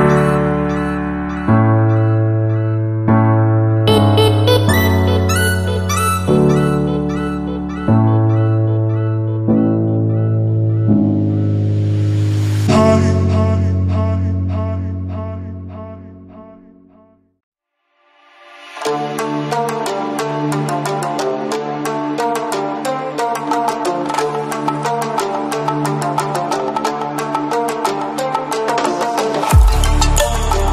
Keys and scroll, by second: 29.0 ctrl+t.